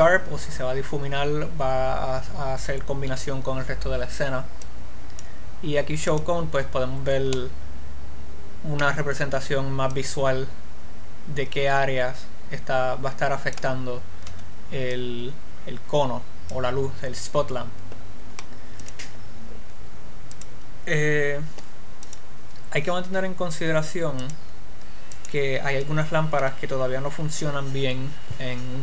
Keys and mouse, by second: 5.0-7.8 drag, 7.8-9.4 middle drag, 10.4 click, 15.4-17.2 drag, 19.2-24.2 drag, 24.6-27.4 drag.